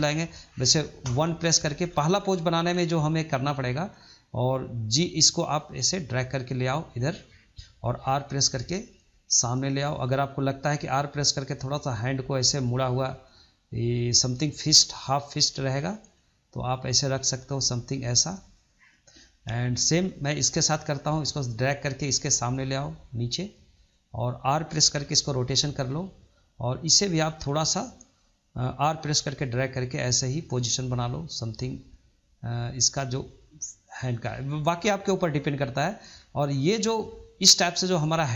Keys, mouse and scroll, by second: 0.9 KP_1, 1.7-2.1 scroll up 2, 2.1-3.2 shift+middle drag, 3.2 click, 5.2 click, 7.9 r, 10.1 click, 10.7 r, 15.4 click, 15.9 click, 16.5 click, 16.9 r, 20.0 click, 21.0-24.0 drag, 26.8 click, 28.7 r, 32.5 click, 32.9 r, 33.9-34.8 scroll down 1, 34.8-38.3 middle drag.